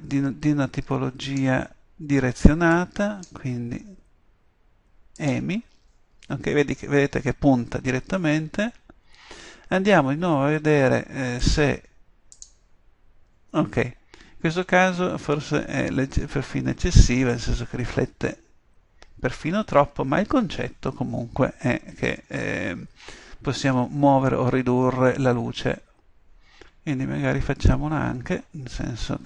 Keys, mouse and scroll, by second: 8.0-9.6 middle drag.